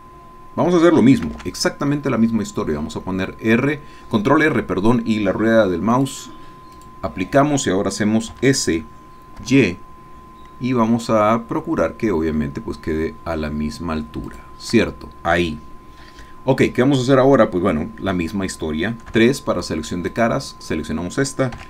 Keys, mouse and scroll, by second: 1.2 ctrl+r, 5.9 click, 6.7 click, 8.3 s, 9.4 y, 14.3 shift+click, 19.2 3, 20.3 click, 21.5 x.